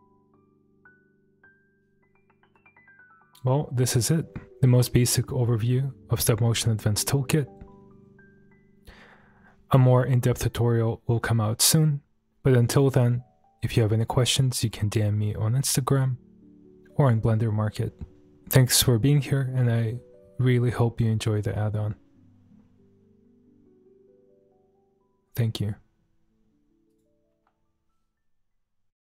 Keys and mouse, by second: 2.6 space, 26.9 click.